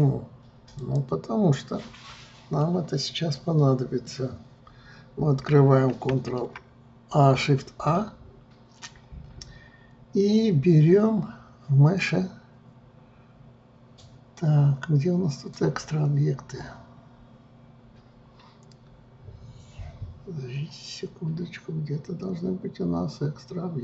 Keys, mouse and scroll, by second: 2.8-6.2 middle drag, 6.2 shift+a.